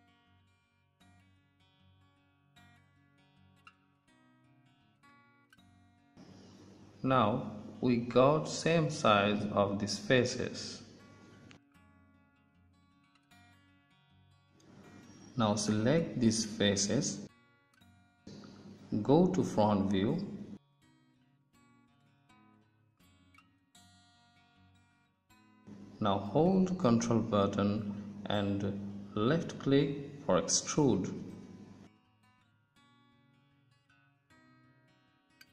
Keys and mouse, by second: 3.3 s, 14.0-18.5 drag, 19.5 KP_1, 28.3 ctrl+z, 31.6 ctrl+z, 33.0 ctrl+z.